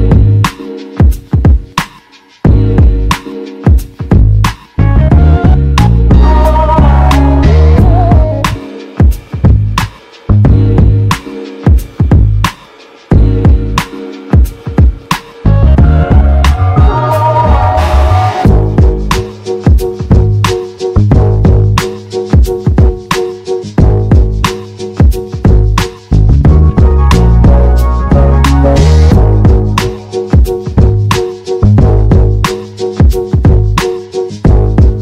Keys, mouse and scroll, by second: 1.0 g, 9.0 g, 11.4 g, 15.2 g, 17.1 g, 19.3 g, 23.0 g, 26.4 g, 26.5 g, 28.0 g.